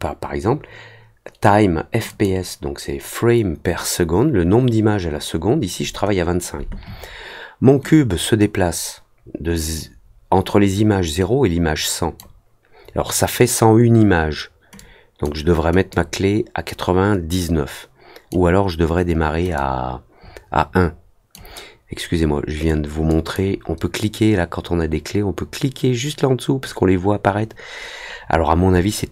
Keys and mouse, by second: 2.0 click, 7.8-12.1 drag, 14.7 click, 15.9-18.2 drag, 19.5-21.3 drag, 23.0 click.